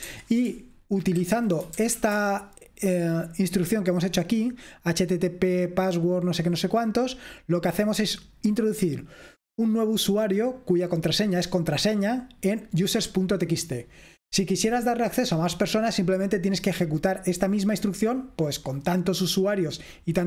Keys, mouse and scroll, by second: 0.1 Escape, 1.0-2.5 typing, 4.7-7.7 drag, 10.1-11.2 drag, 11.5-12.7 drag, 17.3-18.6 drag.